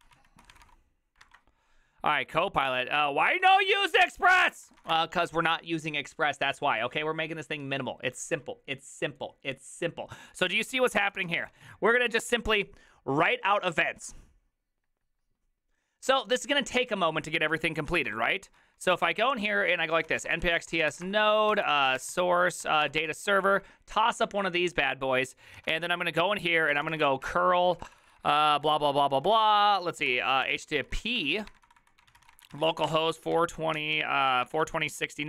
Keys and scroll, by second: 0.0 ctrl+d, 0.2 ctrl+o, 0.3-1.1 typing, 3.6 alt+{, 3.9 ctrl+t, 4.1 ctrl+h, 4.2-5.4 typing, 10.9 ctrl+c, 11.0 ctrl+:, 11.1-11.6 typing, 11.2 Return, 18.1 ctrl+a, 18.6 ctrl+a, 18.6 ctrl+c, 18.9 ctrl+c, 19.3 ctrl+c, 19.7-22.4 typing, 22.8 Tab, 22.8 Return, 23.0 Return, 25.5-27.5 typing, 27.8 ctrl+w, 27.9 ctrl+w, 28.1 ctrl+w, 29.3-35.2 typing.